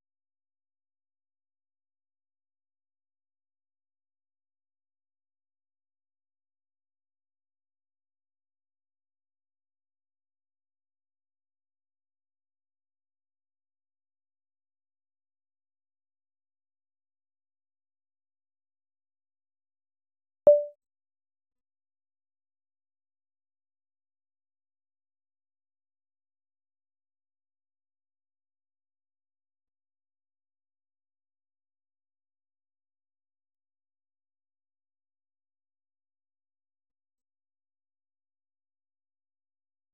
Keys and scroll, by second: 1.3-5.3 typing, 15.6 ctrl+l, 17.4-22.6 typing, 23.8-25.5 typing, 25.6 ctrl+u, 26.6 ctrl+u, 26.8 ctrl+u, 27.0 ctrl+u, 27.4 ctrl+d, 27.8 ctrl+d, 28.0 ctrl+d, 28.2 ctrl+d, 28.6 ctrl+d, 28.9 Escape, 30.2 Escape, 30.8-31.7 typing, 33.8 typing, 34.1 Return, 38.4-39.9 typing.